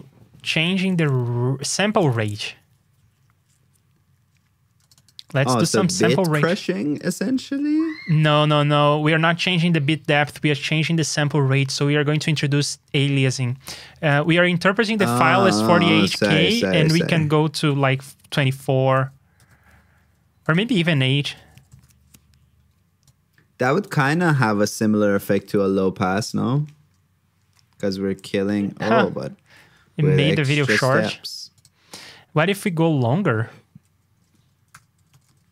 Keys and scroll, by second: 5.4 super+c, 5.6 super+Tab, 7.3 super+v, 23.8 super+c, 24.3 super+v.